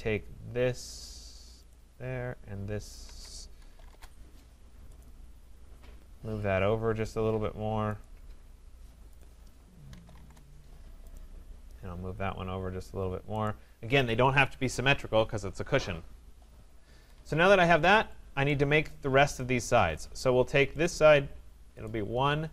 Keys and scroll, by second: 3.9 Return, 10.2 Return, 16.9 Escape.